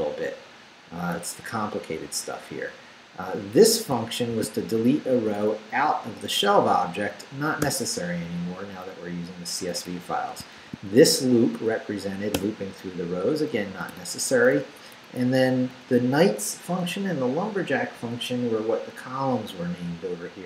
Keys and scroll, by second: 1.3 Up, 4.3 shift+v, 4.8 shift+Down, 7.6 d, 8.7 Up, 10.4 shift+Up, 10.6 shift+v, 10.9 shift+Down, 12.4 d, 13.3 Up, 13.7 d, 14.3 Down, 14.9 Up, 15.2 Right.